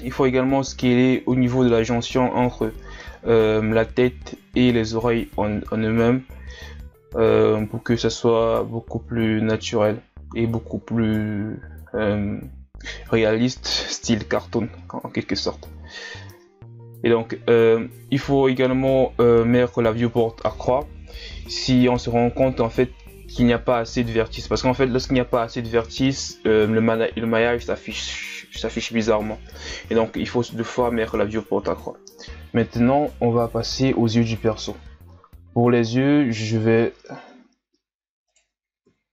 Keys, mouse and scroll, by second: 0.1 KP_1, 0.4 ctrl+scroll up 7, 0.6 middle click, 1.0 right click, 1.3 click, 1.8 middle click, 2.2 click, 2.6 KP_1, 3.3 ctrl+z, 3.5 middle click, 4.0 right click, 4.3 KP_1, 4.7 click, 5.5 middle click, 5.9 right click, 6.1 KP_1, 6.5 click, 7.2 middle click, 7.5 right click, 7.7 KP_1, 8.2 click, 9.1 Tab, 9.3-9.6 scroll down 2, 9.9 scroll up 1, 10.5-12.1 drag, 12.1 shift+scroll down 1, 12.2 scroll up 1, 12.3 Tab, 12.8 right click, 13.7 Tab, 14.1 middle click, 14.7 Tab, 14.9 middle click, 15.4 right click, 15.5 shift+right click, 15.6 shift+right click, 15.8 middle click, 16.2 shift+right click, 16.4 middle click, 16.6 shift+right click, 16.8 shift+right click, 16.9-17.3 scroll down 2, 17.0 middle click, 17.3 shift+scroll up 4, 17.5 shift+right click, 17.6 middle click, 17.8 ctrl+Tab, 18.4 w, 18.9 w, 19.3 Tab, 19.5 KP_1, 19.8-20.2 scroll down 2, 20.2-20.7 ctrl+scroll up 5, 20.7 Tab, 21.0 right click, 21.5 Tab, 21.7-22.1 scroll down 2, 22.3 middle click, 22.6 KP_1, 22.8 scroll up 3, 22.9 Tab, 23.2 right click, 23.4 middle click, 23.7 scroll up 1, 23.9 click, 24.5 right click, 24.7 ctrl+KP_Add, 24.9 ctrl+KP_Add, 25.1 KP_1, 25.4 w, 26.0 Tab, 26.1 scroll down 4, 26.2 scroll up 1, 26.5-26.9 scroll down 1, 26.9 a, 27.3 scroll up 1, 27.5 Tab, 27.7 alt+right click, 28.3 alt+right click, 28.5 ctrl+KP_Add, 28.6 ctrl+KP_Add, 29.3 ctrl+KP_Add, 29.5 ctrl+KP_Subtract, 30.0 click, 30.9 scroll down 4, 31.2 scroll up 1, 31.3 Tab, 31.5-31.9 scroll down 3, 31.9-32.5 scroll up 1, 32.5-34.0 shift+scroll up 1, 34.0-34.7 scroll up 1, 34.7 Tab, 35.9-38.2 middle drag, 38.2 right click, 38.8 KP_1.